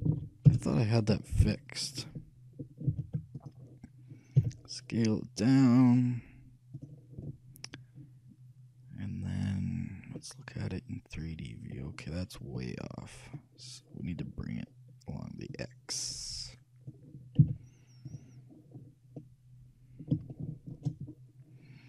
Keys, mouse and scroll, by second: 3.0 ctrl+s, 4.6 s, 10.3-14.3 middle drag, 15.6-17.5 drag, 17.5 z, 17.9 click, 17.9 right click, 18.5-19.3 scroll up 1, 19.3-21.8 middle drag.